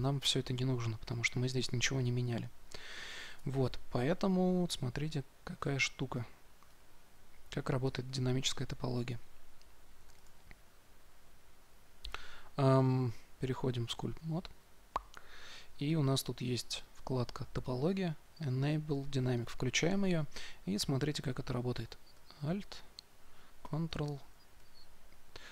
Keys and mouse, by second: 3.3 Tab, 5.6 click, 5.6 middle click, 5.6 right click, 6.0-9.2 drag, 8.0-9.2 middle drag, 8.0-9.2 right drag, 8.0 x, 10.1 shift+a, 14.6-17.3 drag, 23.8-25.5 drag.